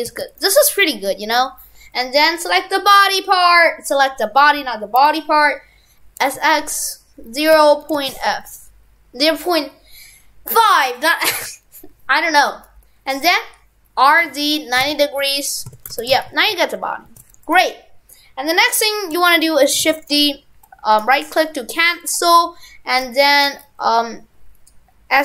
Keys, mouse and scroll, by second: 1.4 right click, 16.0 shift+f, 19.8 shift+d.